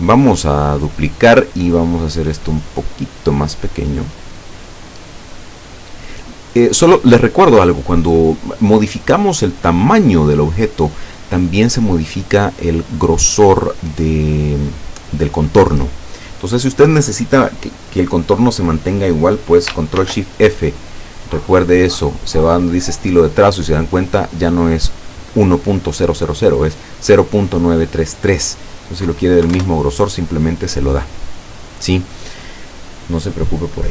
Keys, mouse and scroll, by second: 1.4-7.1 drag, 20.0 ctrl+shift+f, 22.4 click, 28.4 click, 29.5 KP_1, 29.6 KP_Enter, 33.8 click.